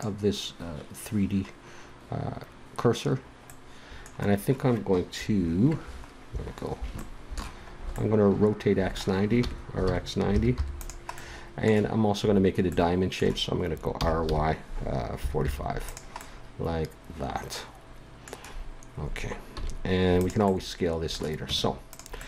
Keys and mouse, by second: 5.2 KP_1, 9.3 r, 13.9 r, 15.8 click, 19.5 s, 21.5 Tab.